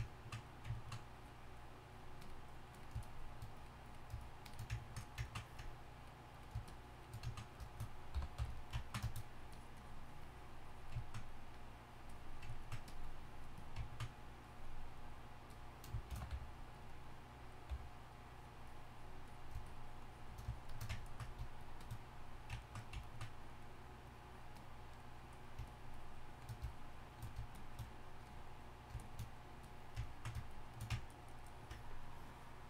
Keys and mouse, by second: 0.0-8.6 drag, 8.1 y, 8.4 f, 9.5-11.2 drag, 13.9 click, 14.1-17.4 drag, 16.1 shift+c, 16.3 f, 17.7 f, 18.3-20.8 drag, 30.1-31.0 drag, 31.0 click.